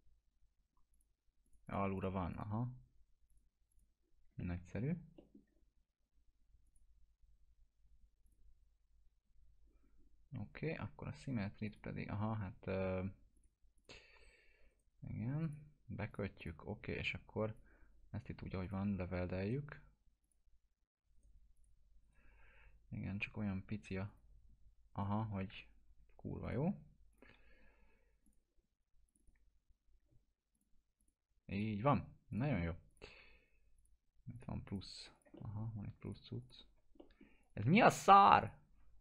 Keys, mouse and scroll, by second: 0.9 click, 4.4-5.0 alt+middle click, 6.7 click, 11.7 click, 14.7 right click, 15.4-17.6 drag, 19.4 right click, 20.2 click, 21.2 right click, 21.6 click, 22.1 right click, 22.5 scroll up 1, 24.1 click, 24.9 right click, 26.4 click, 29.9 scroll down 1, 30.5 click, 33.8 shift+click, 35.1 click, 35.4 middle click, 35.7 scroll down 1, 36.1 click, 36.4 shift+click, 37.0 middle click, 37.4 click.